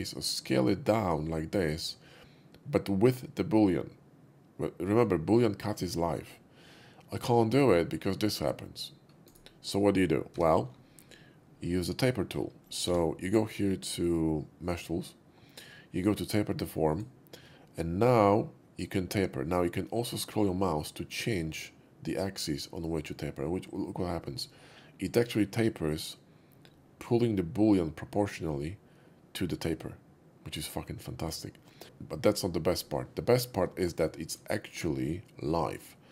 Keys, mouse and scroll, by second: 9.3-10.4 right drag, 10.4 Tab, 12.0 Tab, 12.0 middle click, 12.6 click, 12.8 q, 16.8 click, 21.7 middle click, 31.2 click, 31.8 q, 33.4 shift+middle click, 34.1 shift+middle click, 34.6-36.1 shift+middle drag.